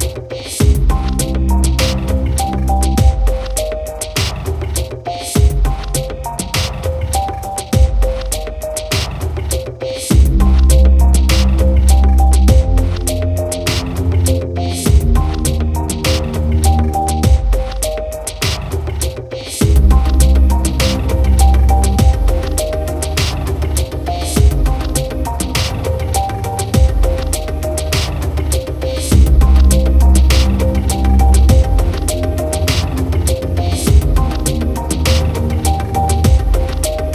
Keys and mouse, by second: 0.1 right click, 0.6 right click, 1.0 right click, 1.5 right click, 2.0 right click, 2.3 right click, 2.7 right click, 3.0 right click, 3.3 right click, 3.7 right click, 4.5 right click, 4.9 right click, 5.3 right click, 5.7 right click, 6.1 right click, 6.4 right click, 6.6 right click, 7.3 right click, 8.0 right click, 8.4 right click, 8.8 right click, 9.1 right click, 9.5 right click, 10.0 right click, 10.4 b, 11.2 right click, 11.5 right click, 11.8 right click, 12.2 right click, 13.4 right click, 14.0 right click, 14.4 right click, 15.7 right click, 17.6 right click, 18.0 right click, 18.4 right click, 19.0 right click, 19.5 right click, 22.4 right click, 23.0 right click, 23.4 right click, 23.6 b, 26.0 right click, 26.8 right click, 27.4 right click, 28.4 right click, 28.7 right click, 29.3 right click, 29.6 right click, 29.8 right click, 30.6 right click, 32.5 right click, 32.9 right click, 33.3 right click, 33.6 right click, 34.2 right click, 35.6 right click, 36.4 right click.